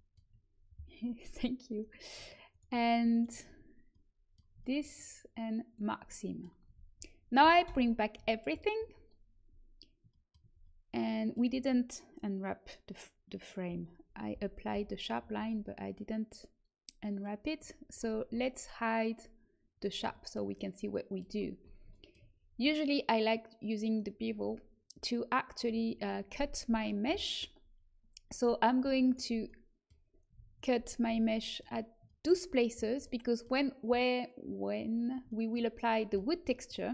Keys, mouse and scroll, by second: 5.6 click, 6.6 a, 7.6 alt+h, 8.1 a, 14.2 n, 14.6 n, 19.6-21.6 drag, 29.0 right click, 29.4-32.2 middle drag.